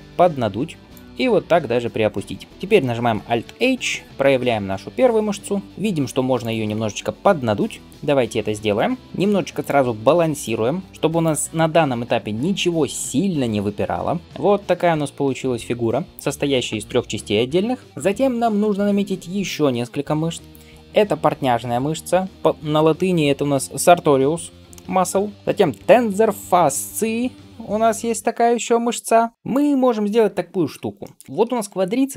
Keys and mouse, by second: 1.1 g, 3.5 alt+h, 6.3 click, 7.8 alt+s, 10.9 alt+s, 12.1-32.1 middle drag.